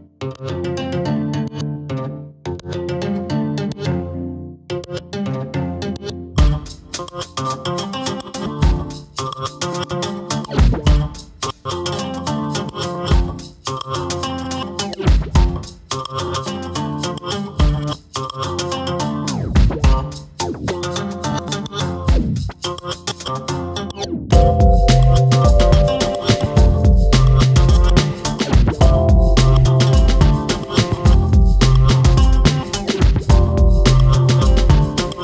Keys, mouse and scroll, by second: 0.9 middle click, 1.5-2.3 scroll up 3, 2.3 l, 2.6 l, 3.2-4.1 drag, 4.1 ctrl+z, 4.6-5.6 drag, 5.6 scroll down 1, 5.9 Tab, 6.0 click, 6.1-6.6 scroll down 1, 6.6-7.0 middle drag, 7.0 scroll up 2, 7.2-7.7 shift+middle drag, 7.7 scroll down 2, 7.9-9.4 shift+middle drag, 9.4 click, 10.0-12.5 drag, 13.2 click, 16.0 click, 16.3 click, 17.2-18.3 drag, 19.5 click, 19.8-21.0 shift+middle drag, 21.0-23.3 drag, 24.0 click, 28.2 click, 28.5-28.9 shift+middle drag, 28.9 scroll up 1, 29.0 shift+middle drag, 29.3 click, 30.4 click, 31.3 click, 32.4-33.8 drag.